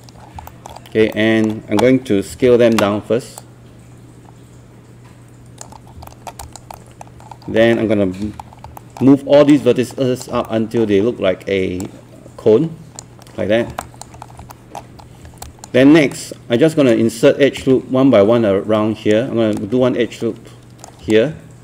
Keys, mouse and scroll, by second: 0.5 alt+scroll down 1, 0.8 scroll up 1, 1.1-2.3 alt+middle drag, 2.2-3.0 typing, 3.4-5.8 drag, 5.8 scroll up 1, 6.1 alt+middle click, 6.4 click, 6.7 alt+middle click, 7.2 scroll down 1, 7.3 scroll up 1, 7.7 alt+middle click, 8.2 w, 8.5 scroll down 1, 8.8 alt+middle click, 9.5 click, 10.5 alt+middle click, 11.8 click, 13.5 scroll down 1, 13.8 alt+click, 14.2 scroll up 1, 14.5 alt+middle click, 15.0 scroll up 1, 15.5 alt+click, 16.1-19.3 right drag, 20.3 ctrl+right click, 21.3 shift+right click.